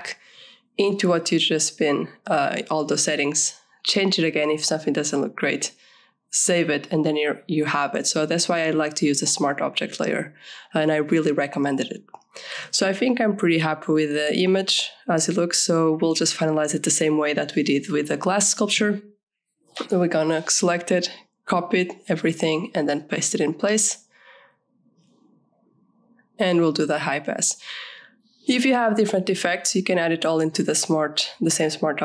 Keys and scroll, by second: 6.9 ctrl+z, 19.5 ctrl+a.